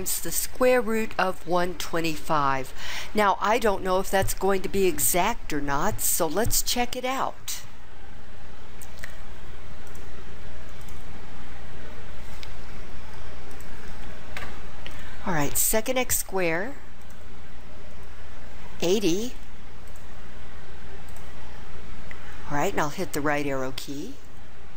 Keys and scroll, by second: 19.9 8, 21.0 0, 23.3 ).